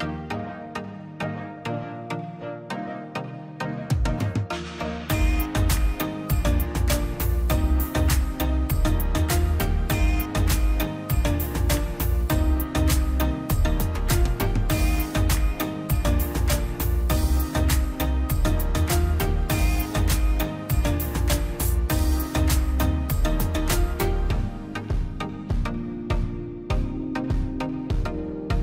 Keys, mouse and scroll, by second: 0.4 click, 1.8 space, 2.2 p, 2.5 click, 2.5 click, 3.2 space, 3.4 scroll down 1, 3.6 middle click, 4.2-4.6 scroll down 1, 4.6 middle click, 4.9 scroll up 1, 5.4 p, 5.6 click, 6.5-6.8 scroll down 1, 6.9 middle click, 7.3 middle click, 7.7-8.1 scroll up 1, 8.1 e, 8.3 click, 9.0 scroll down 1, 9.1 space, 10.4 middle click, 10.6 scroll up 1, 11.5 click, 12.0 m, 12.2 middle click, 12.6-13.1 scroll up 1, 13.1-15.3 drag, 15.3 scroll down 1, 16.1 click, 16.3 scroll down 1, 16.6 middle click, 17.0 scroll up 1, 17.9 l, 18.3 click, 19.1 space, 19.1-19.5 scroll up 1, 19.5 middle click, 19.8 click, 20.8 m, 21.1 middle click, 22.1-22.7 scroll up 1, 22.7 click, 24.1 space, 24.2-24.9 scroll down 2, 24.4 click, 24.9 middle click, 25.4 scroll down 1, 25.7 middle click, 26.5 scroll up 1, 27.6 ctrl+z, 28.0-28.6 scroll up 2.